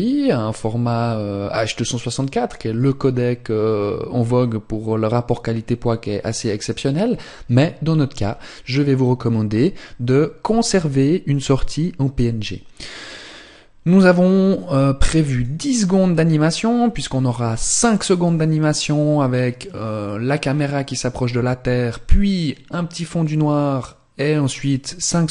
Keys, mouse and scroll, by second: 12.7 click.